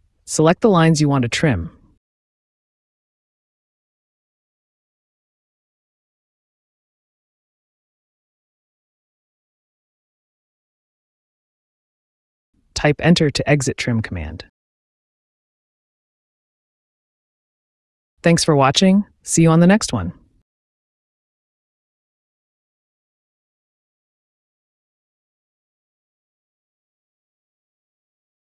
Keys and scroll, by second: 2.3 space, 13.1 space, 16.8 ctrl+s, 18.2 1.